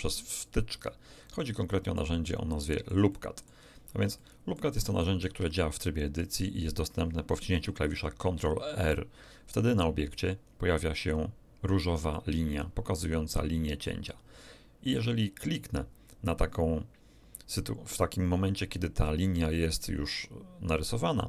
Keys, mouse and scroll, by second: 0.7 click, 1.3 middle click, 3.5 middle click, 3.8 scroll up 2, 4.1 shift+middle click, 5.2 shift+Tab, 8.5 ctrl+r, 21.1 click.